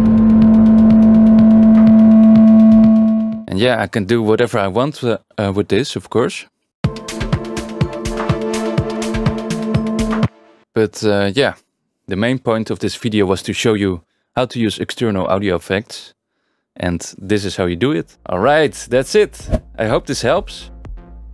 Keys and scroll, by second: 6.8 space, 10.2 space.